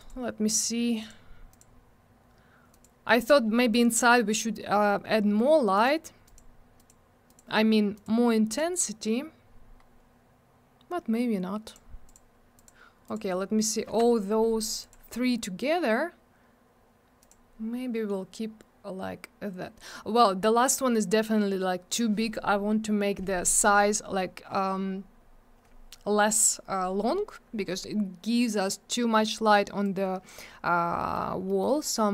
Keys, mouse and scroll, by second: 0.0 click, 0.1 click, 1.0 click, 1.1 click, 1.5 click, 1.6 click, 2.7 click, 2.8 click, 3.2 click, 3.3 double click, 5.7 click, 5.8 click, 6.2 click, 6.3 double click, 6.8 click, 6.9 click, 7.3 click, 7.4 double click, 7.9 click, 8.0 click, 8.5 click, 8.6 click, 10.0 scroll up 1, 10.8-11.5 scroll down 1, 11.6 click, 11.7 click, 12.1 click, 12.1 double click, 12.5 click, 12.6 click, 13.0 click, 13.1 double click, 14.0 Escape, 14.8 click, 14.9 click, 17.2 click, 17.3 click, 29.8 click, 31.0 middle click, 31.1 middle click, 31.3 scroll down 1, 31.5 middle click, 31.6 double middle click, 31.7-32.1 scroll up 1.